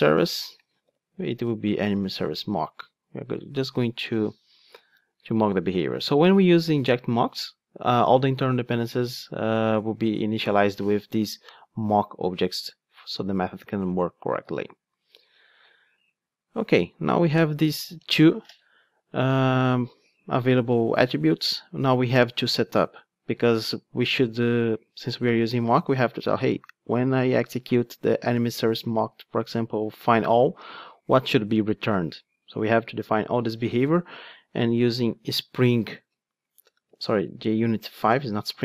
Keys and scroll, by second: 0.2 Return.